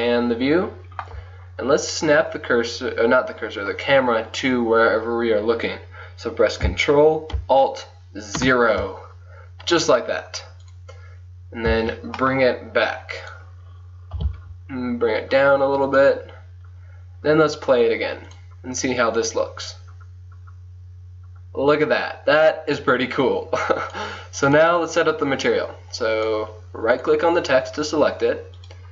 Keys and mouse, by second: 1.4 click, 6.7-8.4 middle drag, 8.4 ctrl+alt+KP_0, 10.7-12.5 drag, 11.8 g, 14.2 g, 17.8-20.0 drag, 24.0-28.0 drag, 27.0 right click, 28.0 right click, 28.6-28.9 drag.